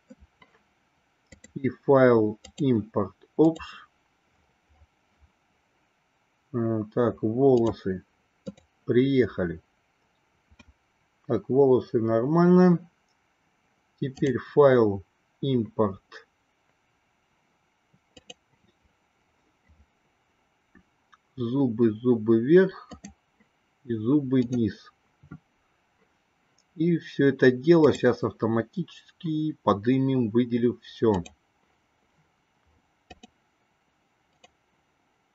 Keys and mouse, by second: 1.4-4.1 drag, 14.2-18.8 drag, 28.0-31.8 drag.